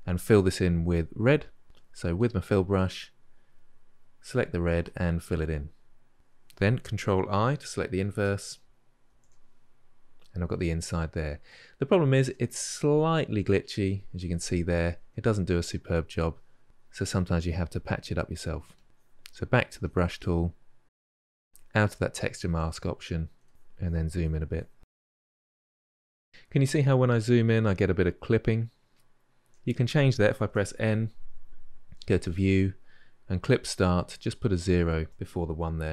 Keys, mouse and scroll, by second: 2.0-4.1 drag, 4.7-5.4 drag, 5.4-8.9 middle drag, 8.9 ctrl+i, 9.5-16.9 middle drag, 17.3-18.4 drag, 18.8-21.4 drag, 22.0-22.7 shift+middle drag, 22.7 click, 23.5-23.9 shift+middle drag, 23.9 click, 24.1 shift+middle click, 24.3 click, 25.2 shift+middle drag, 25.4-25.8 drag, 25.8-29.6 ctrl+shift+middle drag, 30.3 n.